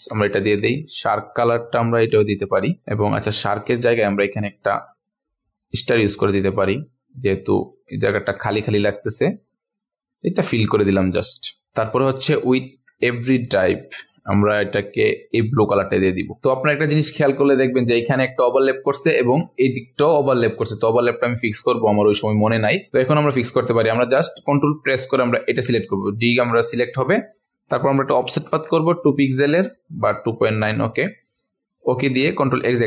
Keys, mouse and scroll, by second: 0.4 v, 1.9 i, 2.5 click, 2.7 v, 2.8-3.4 scroll down 1, 3.4 click, 3.8 ctrl+alt+scroll up 1, 4.9 click, 6.8 alt+click, 9.0-10.3 drag, 10.7-11.1 ctrl+alt+scroll down 1, 11.1 click, 11.7-12.3 ctrl+alt+scroll up 1, 12.3 click, 13.1 scroll up 1, 14.1-15.4 scroll up 1, 15.4 click, 16.0 click, 17.2 ctrl+alt+scroll up 1, 18.4 click, 19.1-19.5 ctrl+alt+scroll down 1, 19.8 ctrl+alt+scroll up 1, 20.6-21.4 ctrl+alt+scroll down 1, 21.6 ctrl+alt+scroll up 1, 22.9 click, 23.7 ctrl+alt+scroll down 1, 26.0 ctrl+alt+scroll down 1, 26.2 ctrl+alt+scroll up 1, 27.1 scroll down 1, 28.2 ctrl+shift+q, 30.2-31.6 ctrl+scroll down 2, 31.6 click, 32.1 ctrl+a, 32.2-32.8 ctrl+alt+scroll down 1.